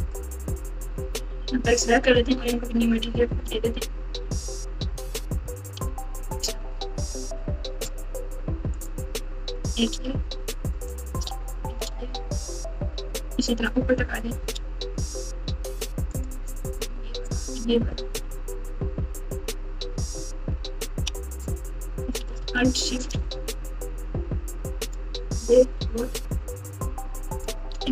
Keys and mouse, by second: 0.0 KP_Add, 0.0 click, 2.1 KP_4, 2.3 KP_4, 3.6-4.1 ctrl+KP_8, 4.7 KP_Add, 4.9 KP_Add, 8.7 alt+click, 10.9 alt+shift+click, 11.9 KP_4, 12.6-13.6 ctrl+KP_4, 16.1 alt+shift+click, 17.2 alt+shift+click, 18.1 KP_4, 18.3 KP_4, 19.1 KP_6, 20.1-21.0 ctrl+KP_4, 24.8 alt+shift+click.